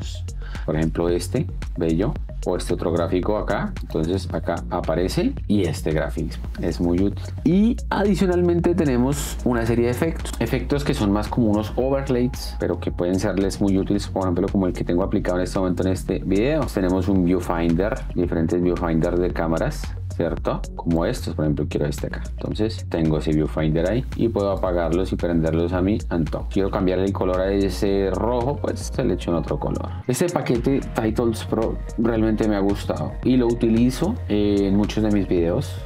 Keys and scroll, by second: 0.6 space, 22.8 space.